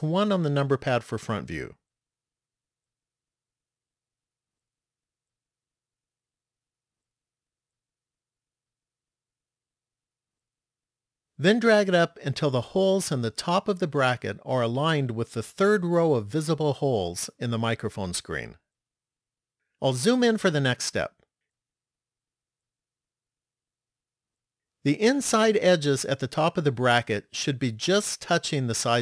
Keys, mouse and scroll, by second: 0.2 KP_1, 1.5-3.9 scroll down 5, 4.6 shift+middle click, 7.3 click, 10.0-11.3 scroll up 4, 11.4 scroll up 1, 13.2 click, 19.8-21.2 scroll up 4, 21.2-22.0 scroll up 1, 22.3 shift+middle click.